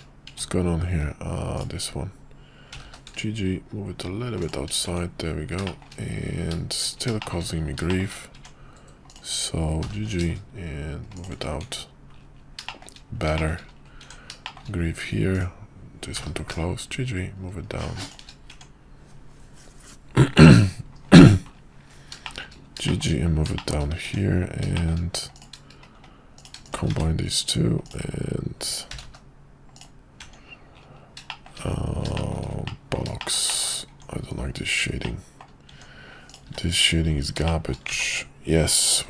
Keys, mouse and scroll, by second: 1.5 click, 2.7 g, 4.8 Tab, 5.6 shift+middle click, 7.2 shift+middle click, 7.9 shift+middle click, 8.3 Tab, 9.8 g, 11.6 Tab, 12.6 shift+middle click, 13.3 middle click, 14.4 shift+middle click, 15.3 click, 16.3 g, 18.5 Tab, 22.2 shift+middle click, 22.8 shift+middle drag, 23.5 shift+middle click, 24.0 Tab, 24.7 shift+middle click, 26.3 click, 27.0 1, 29.0 g, 30.2 Tab, 31.2 shift+middle drag, 32.1 middle click, 32.6 middle click, 33.2 shift+middle click, 33.5 shift+middle click, 33.9 Tab, 35.0 middle click, 36.4 x, 37.4 shift+click, 37.6 shift+middle click, 38.0 ctrl+z.